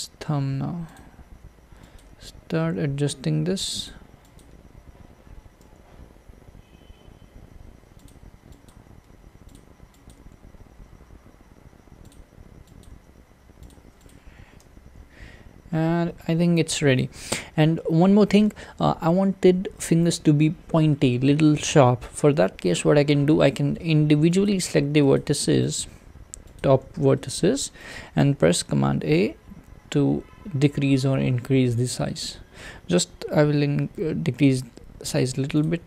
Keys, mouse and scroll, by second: 2.0 click, 2.1 g, 4.4 click, 5.6 g, 8.7 click, 8.9 g, 10.1 click, 10.2 g, 12.8 click, 12.9 g, 14.1 click, 14.6 alt+z, 15.0-15.9 scroll down 1, 15.9-17.7 scroll down 3, 17.7-22.4 scroll up 1, 22.4 alt+z, 22.9-23.5 scroll up 3, 23.5-24.5 shift+middle drag, 24.5 click, 25.7 shift+click, 26.6 shift+click, 27.2 shift+middle click, 27.9 shift+click, 28.8 a.